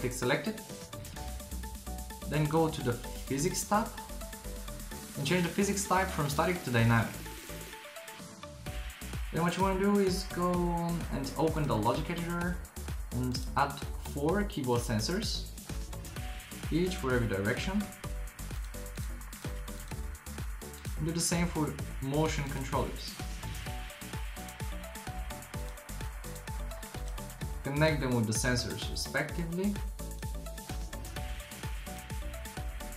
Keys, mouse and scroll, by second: 2.2-3.3 drag, 14.9 drag, 16.9 shift+r, 17.1 shift+r, 17.7 shift+r, 23.5 shift+r, 23.7 shift+r, 23.9 shift+r.